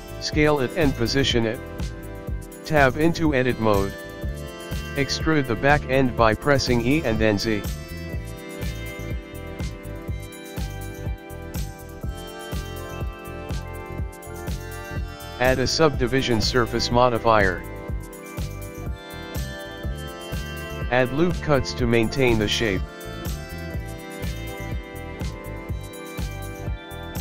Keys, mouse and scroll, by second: 1.9-2.5 scroll down 4, 2.5 middle click, 4.9 Tab, 5.5 click, 6.7 click, 9.1 e, 12.2 middle click, 15.6 click, 15.8 click, 18.4 click, 18.9 click, 19.1 click, 20.4 ctrl+r, 22.6 ctrl+r, 23.4 click, 24.2 middle click, 25.2-25.6 scroll up 2, 26.1 middle click, 26.8 scroll up 4.